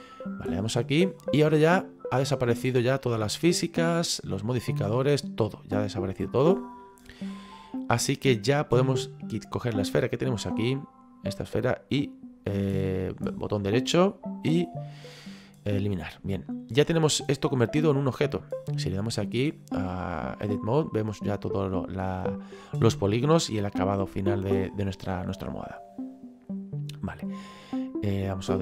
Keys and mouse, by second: 0.6 click, 4.4 click, 5.6 click, 9.7 click, 13.2 right click, 15.6 click, 16.3 middle click, 16.8 right click, 18.1 middle click, 19.6 click, 21.0 middle click, 22.4 middle click, 27.2 click.